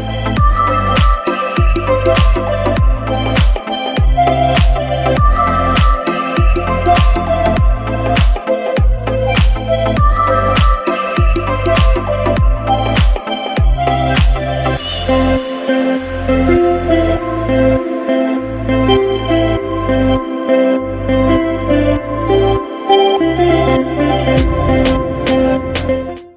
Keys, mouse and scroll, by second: 1.3 click, 2.5 scroll down 3, 3.0-3.6 scroll down 3, 3.7 click, 4.2 middle click, 4.9 scroll up 3, 5.7 click, 6.2 middle click, 6.8 click, 7.4 scroll up 2, 7.6 middle click, 9.2-10.0 scroll down 6, 9.6 middle click, 10.2 middle click, 10.6 scroll up 1, 10.8 scroll down 1, 11.7 middle click, 12.8 scroll up 3, 13.1 middle click, 15.2 middle click, 15.5-16.3 scroll down 7, 16.0 middle click, 16.5 scroll up 1.